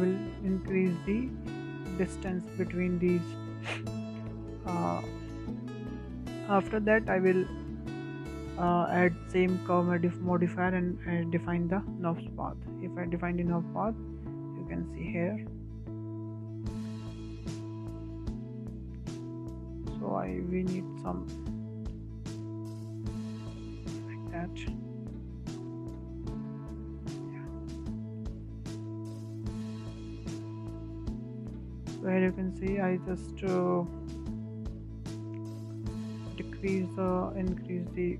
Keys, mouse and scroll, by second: 1.0-4.0 drag, 4.1-5.9 drag, 5.9-7.7 shift+middle drag, 7.7-10.7 drag, 11.6-13.2 drag, 13.2 scroll down 4, 13.7-14.2 scroll up 2, 14.2 w, 14.8 click, 17.5-18.3 middle drag, 18.3 scroll up 1, 18.5-19.1 shift+middle drag, 19.1 Tab, 19.8-21.9 shift+middle drag, 21.9 click, 25.0 w, 25.4 click, 27.4-28.1 scroll up 5, 28.1-29.1 shift+middle drag, 29.1-30.3 scroll down 4, 30.3 click, 31.4 Tab, 31.7 scroll down 1, 32.0-32.4 middle drag, 32.4 scroll up 1, 32.7-34.9 middle drag, 34.9 click, 37.0-38.1 drag.